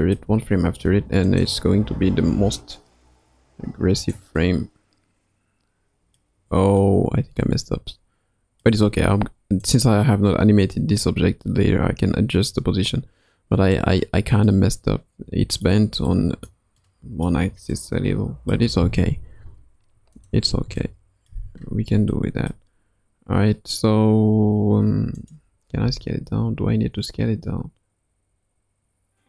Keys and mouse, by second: 2.3 r, 5.2-6.2 middle drag, 6.8-8.6 middle drag, 9.6 click, 12.5-13.8 middle drag, 14.5-15.7 middle drag, 16.1-16.5 middle drag, 16.8-17.3 middle drag, 17.7-20.2 middle drag, 20.2 click, 20.8-21.3 middle drag, 22.1-22.6 middle drag, 25.2 click, 25.8 s.